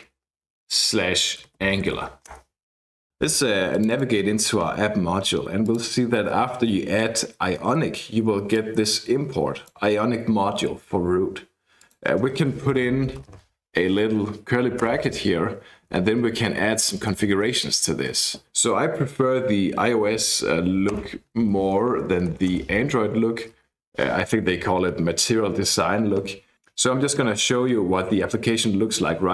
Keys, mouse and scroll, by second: 0.0-2.5 typing, 3.8 click, 5.7 click, 6.2-6.8 scroll up 1, 8.6-9.8 drag, 11.8 click, 14.9 ctrl+space, 16.6 Down, 16.8 Down, 17.1 Up, 17.3 Up, 17.5 Up, 21.0 Return, 22.3-23.8 typing, 26.5 click.